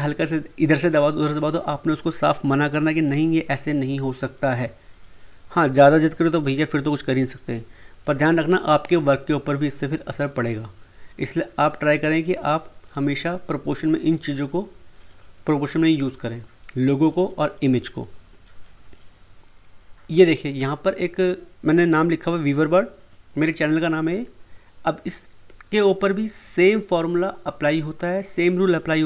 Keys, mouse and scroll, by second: 25.8 click.